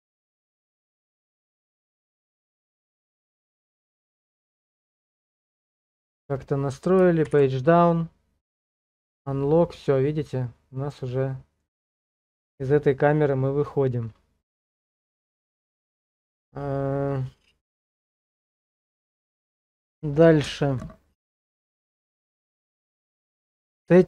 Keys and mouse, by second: 0.4 middle click, 1.2 shift+middle click, 1.8 middle click, 3.4 shift+middle click, 4.2 middle click, 5.4 shift+middle click, 7.2 Page_Down, 9.4-11.6 middle drag, 13.6 click, 17.1 KP_0.